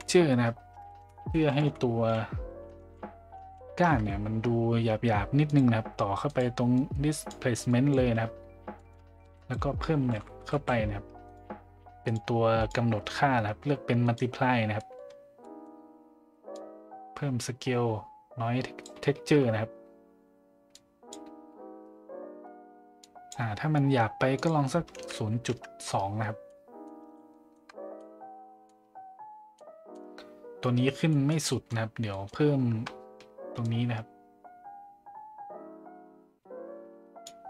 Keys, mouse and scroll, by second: 0.8 BackSpace, 2.8 Left, 6.7-7.3 drag, 7.7 click, 8.8 middle drag, 9.2 shift+a, 12.5-14.2 drag, 14.8 middle click, 15.5 middle click, 16.5-18.9 drag, 20.7 click, 23.0 click, 24.3-26.0 drag, 26.4-26.8 middle drag, 27.1-27.5 shift+middle drag, 28.0-28.6 middle drag, 29.5-29.9 middle drag, 31.3 middle click, 31.5 middle click, 32.2 middle click, 33.7-37.2 shift+drag.